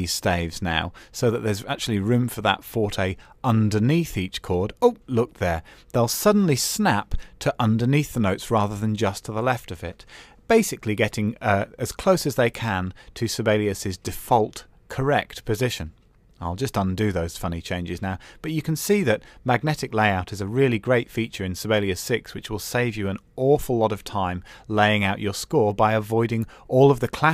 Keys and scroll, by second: 14.0 super+z, 21.0 super+z.